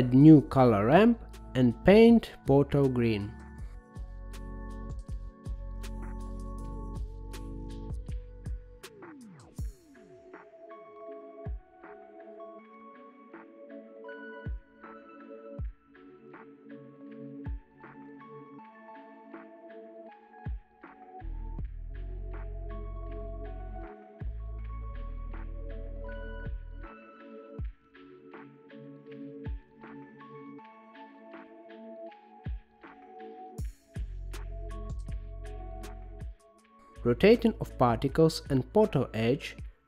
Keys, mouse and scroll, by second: 1.2-2.3 middle drag, 2.5 shift+a, 7.4-11.6 drag, 12.3-14.5 drag, 15.5-17.8 drag, 23.7-26.0 drag, 30.4 click, 32.0-33.4 drag, 34.6 click, 36.1-38.8 middle drag, 38.8-39.8 drag.